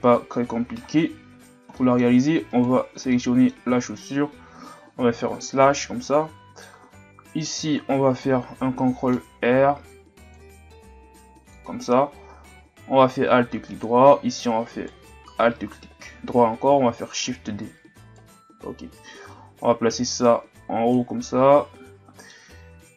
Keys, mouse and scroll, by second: 0.4-0.9 scroll up 7, 0.9-1.4 scroll down 1, 1.4-1.7 scroll up 1, 1.7-2.1 middle drag, 2.1-2.5 scroll up 2, 2.5 right click, 2.8 Tab, 3.1-5.0 middle drag, 5.0 KP_Divide, 6.1-9.1 middle drag, 9.3 ctrl+r, 12.5 ctrl+Tab, 14.7 alt+right click, 17.3 shift+d, 19.3 click, 21.3-22.6 middle drag, 22.6 Tab.